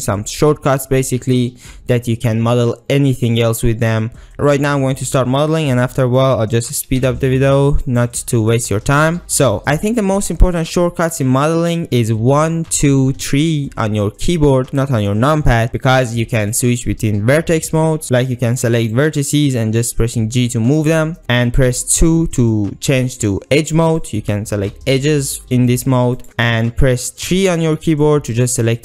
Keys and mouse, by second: 4.5 shift+middle click, 6.8 s, 7.1 x, 7.9-9.5 drag, 12.3 1, 12.8 2, 13.2 3, 17.4 1, 18.0 ctrl+z, 18.9 click, 19.5 g, 20.8 click, 22.0 2, 24.0 click, 24.9 g, 27.3 3, 28.3 click.